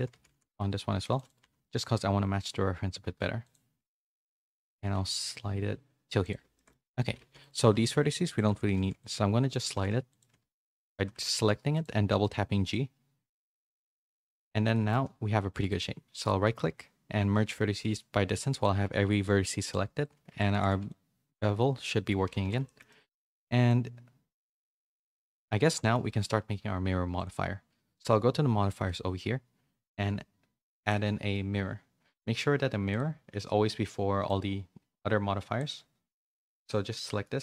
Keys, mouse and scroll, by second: 0.0-1.4 typing, 4.0 a, 4.2 a, 4.3 c, 4.8 g, 6.5 shift+middle click, 6.8-10.9 typing, 12.4 z, 12.9 middle click, 14.0 1, 14.4 a, 14.7 middle click, 15.7-19.7 right drag, 20.3 Tab, 20.5 a, 20.7 a, 20.8-22.1 middle drag, 22.3 a, 22.5 a, 22.6 shift+middle click, 22.8 middle click, 23.6 middle click, 24.2-25.4 middle drag, 25.4 Tab, 25.7 middle click, 26.0 1, 30.8-32.9 drag, 34.2-35.6 drag, 37.0-37.4 drag.